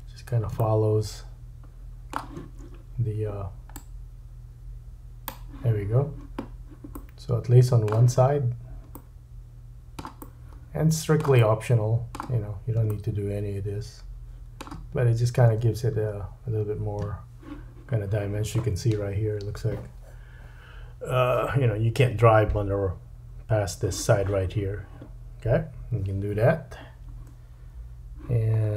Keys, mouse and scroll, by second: 0.6 shift+middle click, 3.7 click, 6.9 middle click, 8.2-9.0 scroll up 2, 9.1-11.6 middle drag, 12.9 middle click, 15.6 space, 16.1-18.6 scroll down 2, 28.6-28.7 scroll up 3.